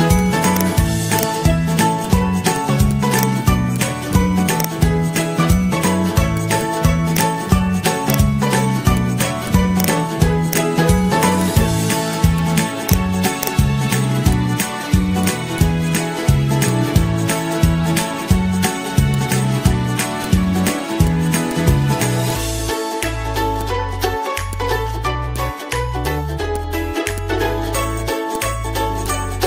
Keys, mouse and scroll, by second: 1.7 ctrl+c, 5.2 ctrl+v, 8.7 ctrl+c, 11.1 ctrl+v, 14.0 ctrl+v, 17.2 g, 23.9 ctrl+z, 28.0 Pause, 28.6 ctrl+-, 29.4 z.